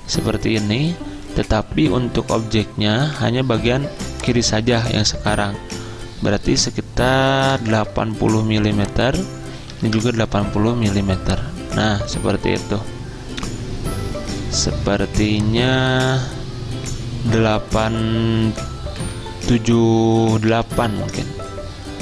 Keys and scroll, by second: 7.3 typing, 9.8 typing, 13.7-14.5 typing, 19.0 typing, 20.3-21.5 typing.